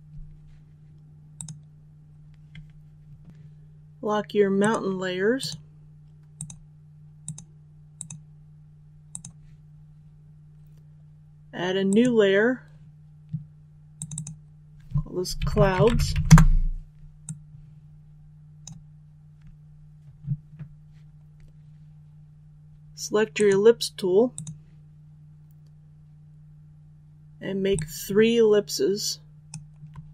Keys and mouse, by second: 1.3 click, 15.3-16.0 typing, 16.2 Return, 17.2-18.7 drag, 27.7-29.4 shift+drag.